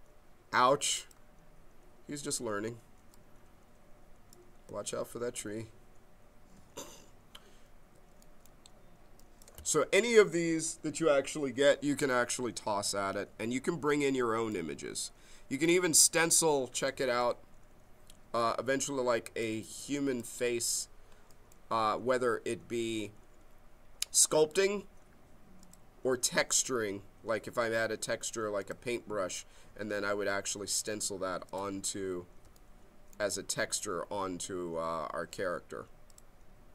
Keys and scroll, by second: 2.3 q, 5.3 ctrl+z.